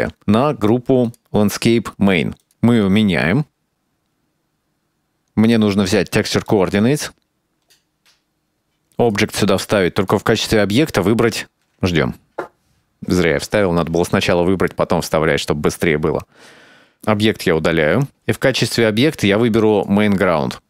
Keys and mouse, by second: 4.4 middle click, 5.5 click, 6.5 middle click, 7.3-8.3 drag, 8.5 middle click, 9.2-14.5 drag, 18.1 click.